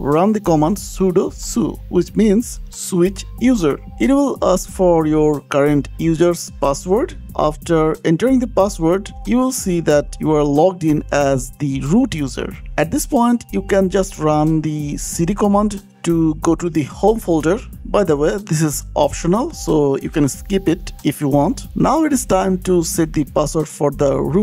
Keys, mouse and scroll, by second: 1.7 Return, 3.5 click, 5.2 click, 5.7 click, 6.6-7.3 typing, 7.5 KP_Enter, 9.9 click, 11.9 click, 13.1-13.9 typing, 15.4 click, 17.2 click, 20.7 click, 21.6 scroll down 3, 22.8 click.